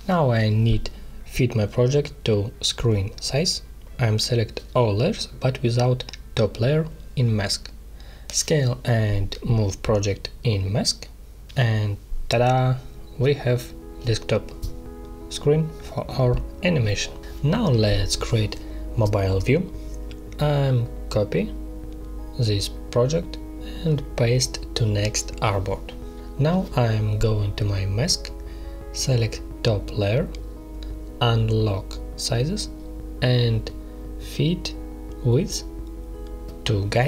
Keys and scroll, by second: 11.9 space, 16.6 space, 21.8 ctrl+c, 22.0 space, 24.1 ctrl+v.